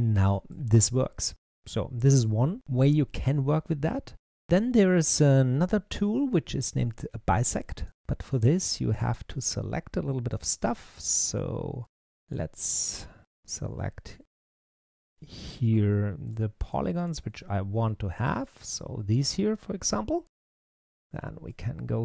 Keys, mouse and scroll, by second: 5.0-7.7 drag, 8.1-9.3 drag, 10.1 alt+click, 10.8 middle click, 11.7 alt+click, 12.2 alt+click, 13.2 shift+click, 13.4-14.4 shift+drag, 14.8 shift+click, 15.0-16.1 middle drag, 16.1 shift+click, 16.5 shift+click, 16.9 shift+click, 17.2-20.3 middle drag, 21.3-22.0 drag.